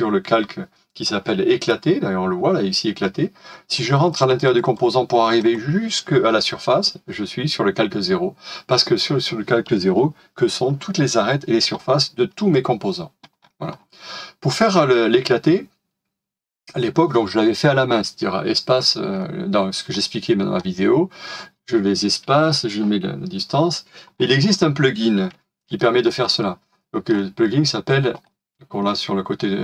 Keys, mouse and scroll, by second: 3.9 double click, 13.3-13.7 scroll down 1, 17.6-18.2 scroll down 1, 19.1 scroll down 1, 19.1 scroll up 1, 19.7-20.0 scroll down 1, 20.0 middle click, 20.5-23.5 scroll up 1, 24.1-24.4 scroll down 1, 25.3 middle click, 26.7 shift+scroll down 1, 28.1 right click.